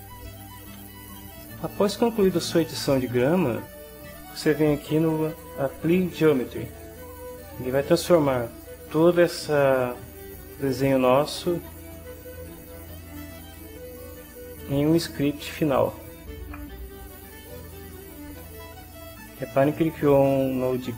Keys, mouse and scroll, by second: 0.2 ctrl+click, 1.4 click, 2.0 shift+click, 2.7 ctrl+shift+click, 13.1 click.